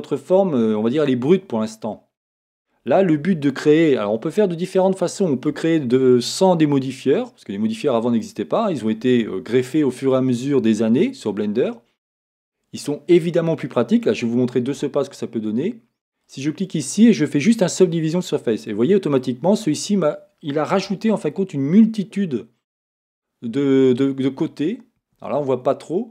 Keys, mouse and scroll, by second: 1.8-16.3 middle drag, 3.2 Tab, 7.5-8.2 scroll down 2, 16.3-18.7 drag, 18.7-26.1 middle drag, 19.5-20.8 scroll up 2, 20.8 Tab, 24.4 Tab.